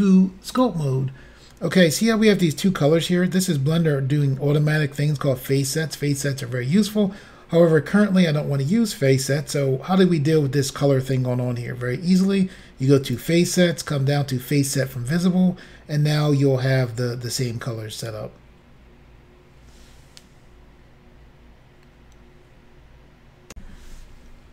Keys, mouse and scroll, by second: 0.6 click, 13.1 click, 14.9 click, 23.5 Insert.